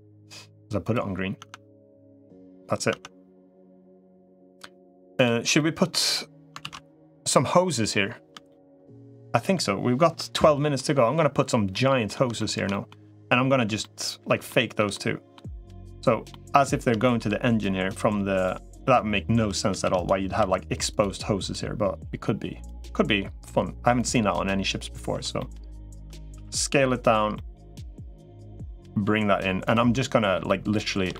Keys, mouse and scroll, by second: 1.3 Tab, 2.7 click, 3.1 Tab, 5.4 middle click, 6.5 ctrl+s, 6.8-8.5 middle drag, 9.0 middle click, 10.6 middle click, 11.5 middle click, 12.2 shift+middle click, 12.6 middle click, 13.7 middle click, 14.3 shift+middle click, 14.8 middle click, 16.2 middle click, 16.8 shift+middle click, 19.5 shift+d, 20.3 s, 21.3-22.7 right drag, 23.9 click, 25.2 shift+middle click, 26.3 s, 27.2 middle click, 28.0 middle click, 28.9 g, 29.7-30.8 middle drag, 31.0 middle click.